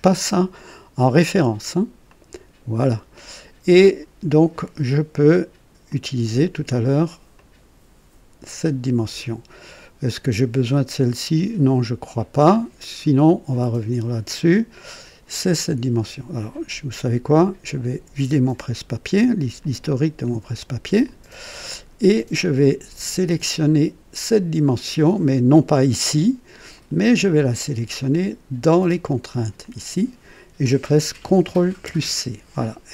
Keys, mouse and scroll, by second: 2.0 click, 5.8 click, 7.3-8.8 drag, 17.7 click, 19.6 click, 21.0 click, 26.6-27.9 drag, 29.6 click, 31.8 ctrl+c, 31.9 ctrl+c.